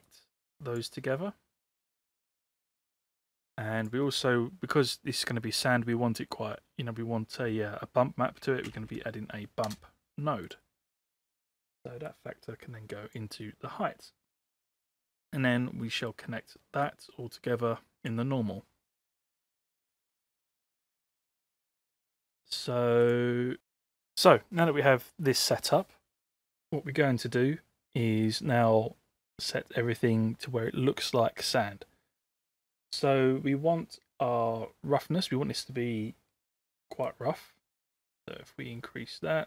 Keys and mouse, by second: 0.1-0.9 drag, 2.6 click, 3.4 shift+a, 12.1-13.3 drag, 16.1 middle click, 16.8-18.1 drag, 37.2-39.4 drag.